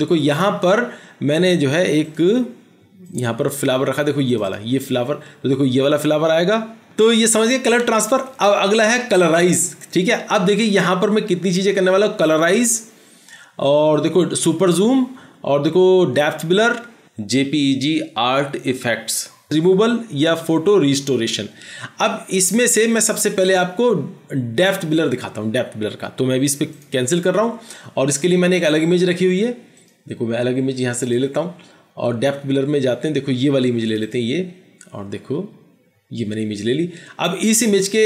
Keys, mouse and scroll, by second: 4.6 double click, 34.1 double click.